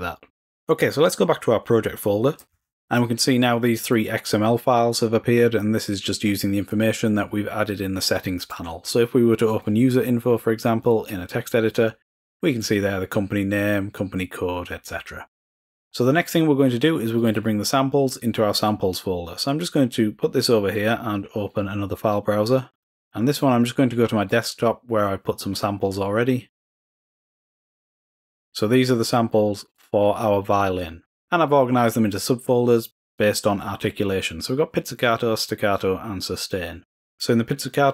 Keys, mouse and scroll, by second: 1.4 alt+Tab, 3.2 click, 8.9-10.4 drag, 11.1 click, 15.8 click, 16.5 click, 18.0 click, 19.3-21.3 drag, 21.6 click, 22.7 click, 23.4 click, 24.1 click, 24.6 click, 26.7 click, 27.8-28.9 drag, 29.0 click, 29.6 click, 37.6 click.